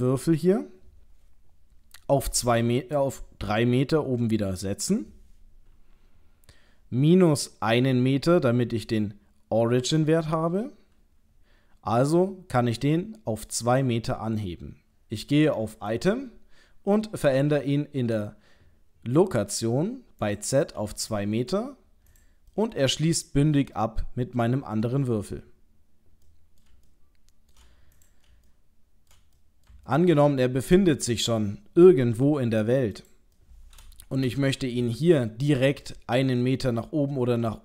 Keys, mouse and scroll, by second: 9.7 middle click, 15.9 click, 20.2 click, 22.1 click, 22.5 middle click, 26.3 middle click, 26.9 shift+middle click, 28.0 click, 28.5 shift+middle click, 29.4 middle click, 29.9 ctrl+middle click, 32.3 g, 33.4 middle click, 34.2 shift+Return, 34.9 shift+middle click, 37.3 middle click.